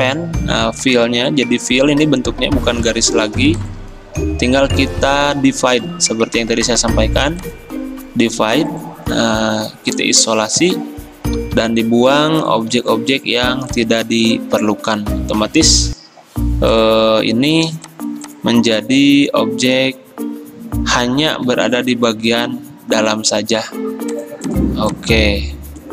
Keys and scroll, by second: 11.4 Delete, 12.7 Delete, 14.1 Delete, 15.5 Escape, 21.0 Delete, 21.5 ctrl+z.